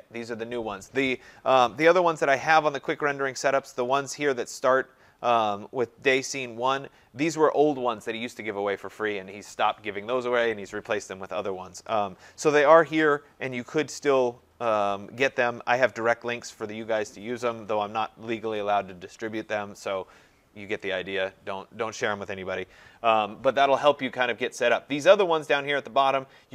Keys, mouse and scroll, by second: 2.4 click, 3.8 click, 5.5 middle click, 10.5 middle click, 10.5 scroll, 13.0-13.7 scroll, 13.1 middle click, 13.7 scroll down 8, 14.4-15.2 scroll down 4, 15.2-15.6 scroll down 2, 22.9-23.8 scroll up 11, 24.2 scroll up 4, 24.6-26.0 scroll down 19, 26.0 scroll down 1, 26.1-26.5 scroll.